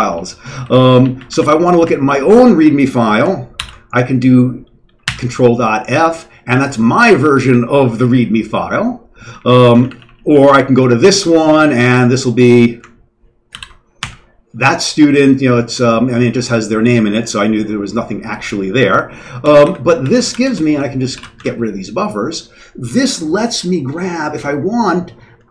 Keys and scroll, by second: 0.1 Down, 0.3 Down, 0.7 Down, 0.7 Up, 1.0 Down, 3.4 Down, 3.6 Right, 3.6 Down, 3.6 c, 9.8 Up, 9.9 Up, 10.1 Up, 10.3 Up, 10.4 Up, 13.5 ctrl+., 14.0 f, 19.4 ctrl+x, 19.6 o, 20.0 ctrl+x, 20.2 k, 20.4 Return, 21.1 ctrl+x, 21.3 1.